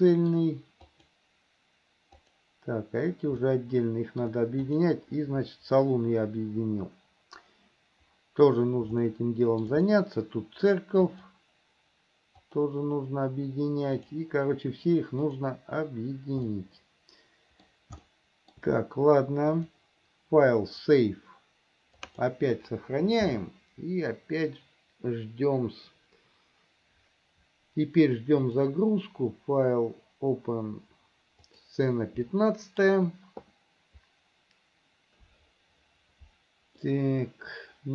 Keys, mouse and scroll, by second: 0.0 middle click, 1.1 click, 2.3 click, 3.6 shift+middle click, 4.8 click, 9.3 shift+middle click, 10.0 middle click, 11.2 click, 12.6 click, 14.1 click, 15.4 click, 16.6-17.9 middle drag, 18.3 shift+middle click, 19.7-26.3 drag, 28.7-35.1 drag, 37.1-37.9 middle drag.